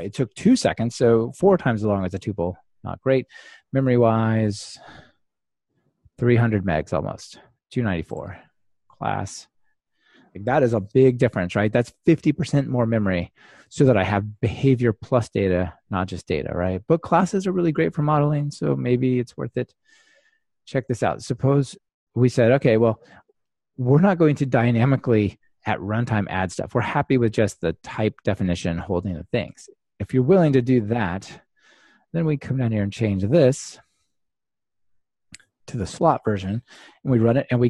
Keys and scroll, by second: 21.1 super+F2, 33.3 super+/, 36.7 ctrl+r.